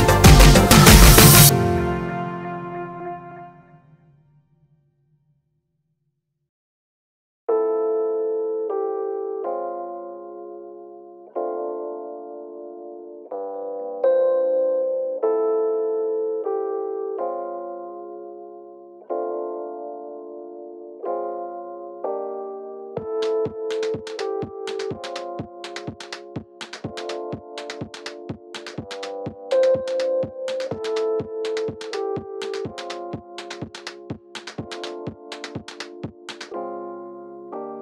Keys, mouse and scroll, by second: 1.8 click, 1.9 s, 3.7 click, 3.9 KP_7, 4.4-7.5 shift+middle drag, 7.2 3, 7.5 click, 7.7 middle click, 8.2 shift+click, 8.5-12.8 middle drag, 11.6 ctrl+r, 12.8 click, 13.5 3, 13.7 click, 13.9 middle click, 14.4 shift+click, 14.7-17.7 middle drag, 15.5 s, 17.7 alt+e, 22.2 click, 24.1 ctrl+r, 28.4 click, 29.1 click, 29.8 shift+click, 30.1 s, 33.2 middle click, 33.9 click, 34.2 shift+click, 34.4-37.8 middle drag, 34.9 s.